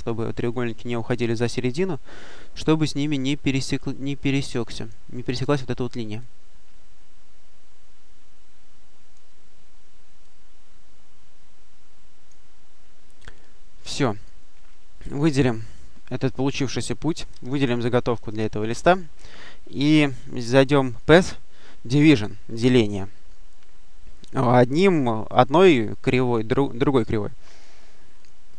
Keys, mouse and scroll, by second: 2.9-5.2 drag, 6.0-9.5 drag, 10.1-12.6 drag, 13.8 click, 16.2 click, 17.7 shift+click, 20.8 click, 27.4 click, 28.0 click.